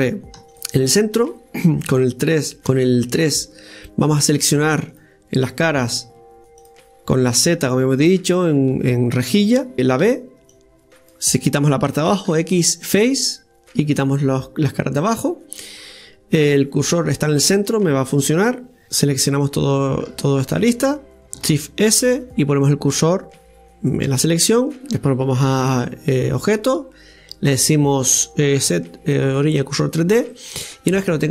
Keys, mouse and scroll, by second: 0.4 ctrl+r, 1.9 KP_3, 2.7 KP_1, 2.8 KP_3, 4.9 click, 6.6-7.7 drag, 7.7 z, 10.0 b, 13.3-18.8 middle drag, 18.8-21.0 right drag, 21.6 shift+s, 25.5 Tab, 26.4-29.4 drag, 30.0-30.3 scroll down 1, 30.3-31.3 middle drag.